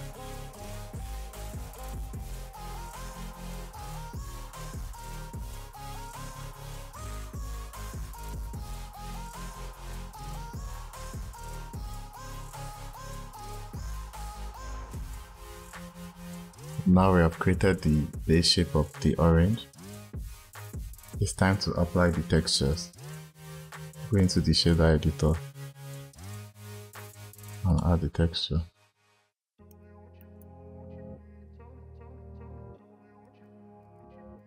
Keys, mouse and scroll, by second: 0.2 scroll up 7, 0.5 click, 0.9 shift+click, 1.2 s, 2.4 click, 2.6 click, 2.9 shift+click, 3.1 s, 3.8 click, 3.9-4.6 scroll down 5, 4.3 click, 4.6 scroll up 3, 4.7 click, 5.0 click, 5.4 shift+click, 5.6 s, 6.6 ctrl+z, 6.7 ctrl+z, 7.1 click, 7.8 scroll down 2, 8.2 click, 9.3 click, 9.8 click, 10.1 scroll down 1, 10.2 scroll up 2, 10.6 click, 11.0 shift+click, 11.3 s, 12.2 click, 12.5 click, 12.9 shift+click, 13.1 s, 14.0 ctrl+z, 14.1 ctrl+z, 14.3 click, 14.8 scroll down 1, 15.0 click, 15.4-15.8 scroll down 1, 15.8 click, 16.5 click, 23.6-24.6 drag, 26.2 click, 27.5-28.7 drag, 28.7-30.1 scroll up 16, 29.6 middle click, 30.1-30.9 middle drag, 31.2 shift+a, 31.9 shift+a, 34.1 click.